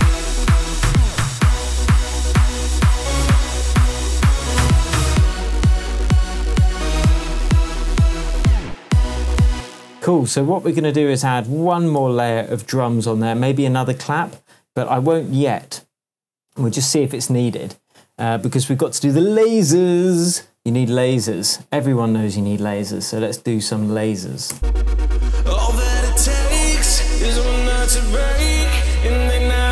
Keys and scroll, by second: 2.7 super+d, 3.9 super+a, 5.7 a, 9.5 space, 12.0 super+d, 18.4 super+s, 24.5 space.